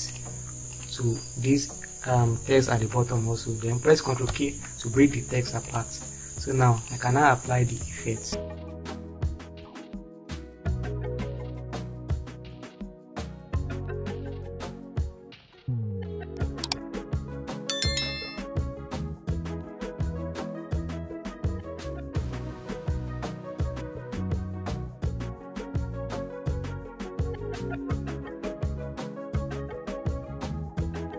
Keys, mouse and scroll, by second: 4.9 ctrl+k, 12.3 Right, 15.3 Right, 18.1 Right, 18.7 Right, 22.2 right click, 28.8 space, 29.3 click, 31.0 Up.